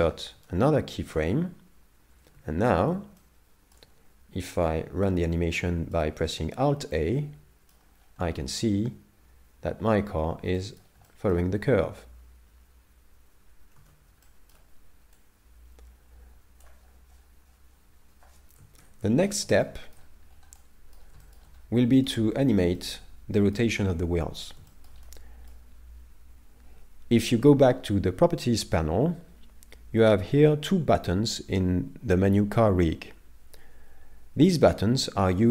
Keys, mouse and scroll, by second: 0.5 shift+middle click, 2.4 alt+a, 3.2 shift+middle click, 4.4 middle click, 8.0 scroll up 1, 10.3 scroll up 2, 10.6 middle click, 11.1 shift+middle click, 13.8 alt+a, 14.3 shift+middle click, 15.2 click, 18.8 shift+Left, 19.7 shift+middle click, 20.3 scroll up 2, 20.6 middle click, 21.2 shift+middle click, 21.8 middle click, 22.3-22.9 scroll up 3, 22.8 shift+middle click, 23.4 middle click, 24.7 shift+middle click, 25.1 middle click, 35.3 middle click.